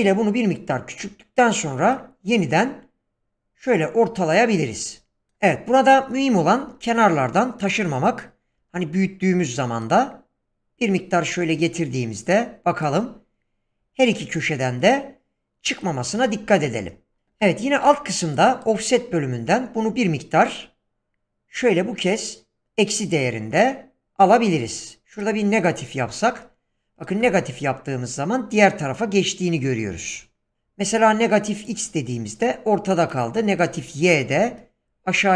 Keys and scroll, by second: 6.6 s.